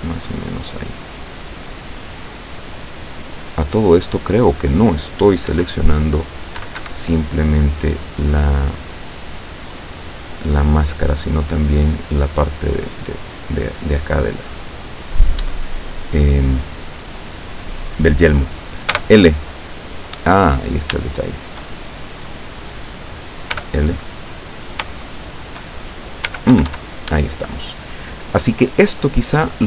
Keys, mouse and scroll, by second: 2.8-4.9 drag, 5.5 KP_7, 6.8 Escape, 7.3-8.6 drag, 8.6 middle click, 8.9-11.3 middle drag, 11.5-11.9 scroll down 1, 12.9-13.2 scroll up 1, 16.6 right click, 19.0 l, 20.6-20.9 scroll up 1, 21.2 shift+middle click, 22.6 right click, 23.6 l, 24.6 scroll down 2, 25.0 shift+middle click, 26.4 l, 29.2 click.